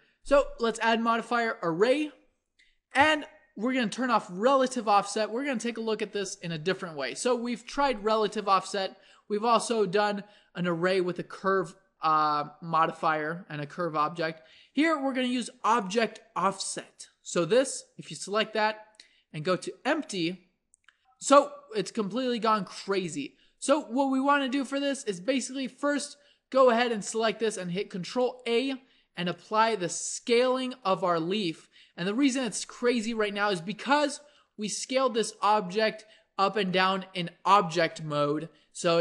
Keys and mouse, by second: 4.4-21.0 drag, 25.0-28.4 drag, 28.4 ctrl+a, 32.3 ctrl+z, 34.3 s.